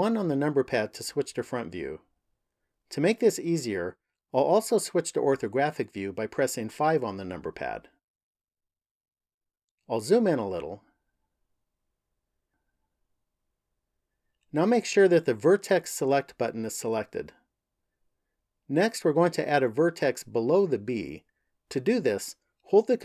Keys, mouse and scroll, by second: 6.5 KP_5, 8.0-8.7 scroll up 1, 8.7 scroll up 1, 9.3-10.2 scroll up 2, 10.2-11.6 scroll up 1, 11.6 shift+middle click, 16.8 click.